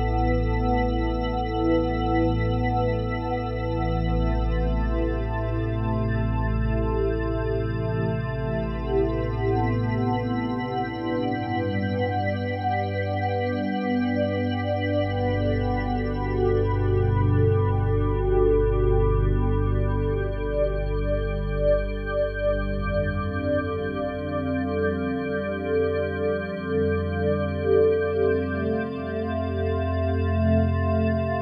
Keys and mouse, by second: 0.7 ctrl+alt+click, 1.1-4.5 ctrl+alt+drag, 1.7 typing, 4.6-5.5 typing, 6.4 click, 7.4-7.9 ctrl+alt+drag, 8.1-11.4 alt+drag, 13.2-16.0 alt+drag, 17.3 1, 17.9-18.8 ctrl+alt+drag, 19.1 ctrl+alt+drag, 19.9-21.2 ctrl+alt+drag, 21.2 ctrl+s, 21.9-31.4 alt+drag.